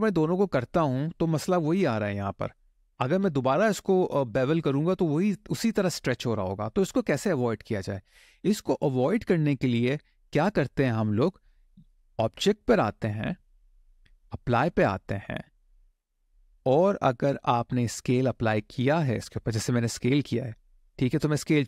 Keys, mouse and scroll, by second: 12.1-21.6 drag.